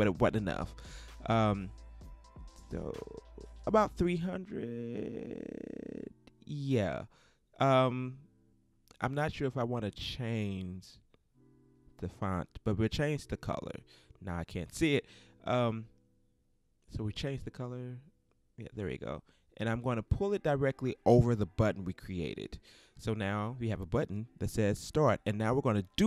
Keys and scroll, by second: 1.6 shift+3, 2.4 shift+Return.